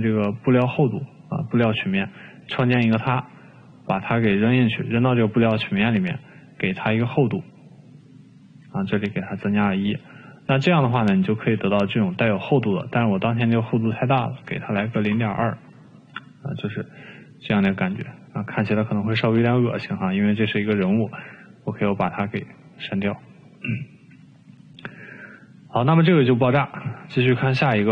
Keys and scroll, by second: 10.2 1, 15.2-16.5 typing, 19.0 1.